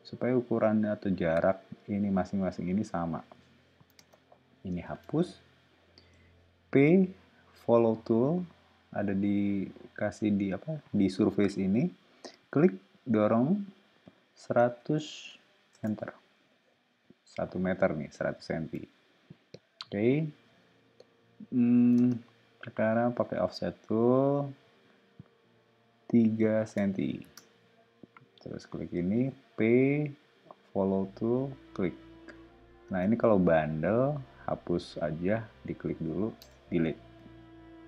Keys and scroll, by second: 3.4 o, 3.9 space, 4.9 BackSpace, 6.1 p, 14.3-15.3 typing, 15.7 Return, 16.3 o, 21.9 space, 23.1 f, 26.3 3, 26.6 Return, 27.2 space, 28.9 p, 32.8 space, 36.4 BackSpace.